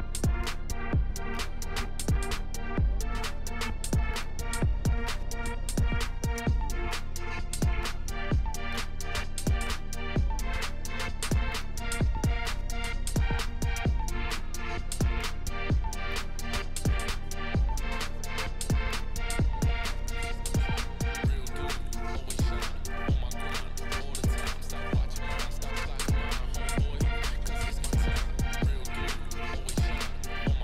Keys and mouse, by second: 0.6 shift+middle drag, 1.1 Tab, 1.7 1, 2.1 click, 3.6 click, 4.2 g, 5.8 click, 6.0 Tab, 6.9 shift+click, 7.9 middle drag, 8.6-8.9 middle drag, 9.0 click, 9.2 Tab, 9.4 2, 10.2 click, 10.8 Tab, 11.1 middle drag, 11.6 middle click, 11.9 Tab, 12.2 shift+middle click, 12.7 middle click, 12.9 3, 13.5 middle click, 14.8 e, 15.9 ctrl+z, 16.2 click, 16.2 middle click, 17.3 middle click, 18.4 KP_7, 19.1 middle click, 20.3 e, 24.0 ctrl+r, 26.5 ctrl+z, 26.7 ctrl+z, 27.5 Tab, 27.7 middle drag, 28.7 middle click.